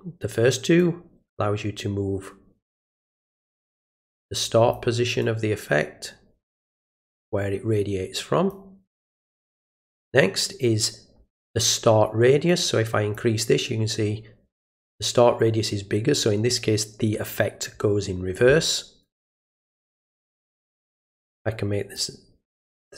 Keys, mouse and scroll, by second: 0.8-4.7 drag, 5.2-8.5 drag, 12.5-13.1 drag, 19.2 click, 21.1 click.